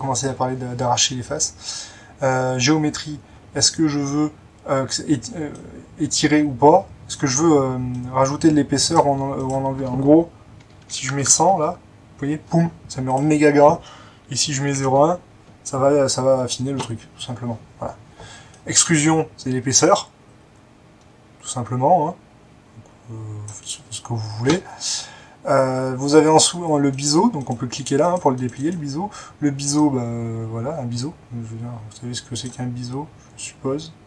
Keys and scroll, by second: 10.9-11.4 typing, 11.5 Return, 13.8-15.0 typing, 14.8 Return.